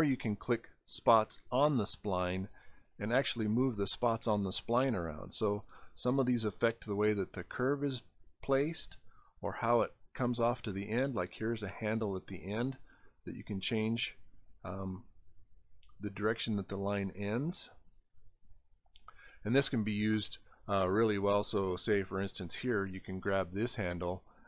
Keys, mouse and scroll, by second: 1.3-4.7 drag, 6.5-8.3 drag, 10.5 scroll up 2, 12.3-14.6 right drag, 14.8-16.2 drag, 16.9 scroll down 4, 18.9 scroll, 19.9 scroll.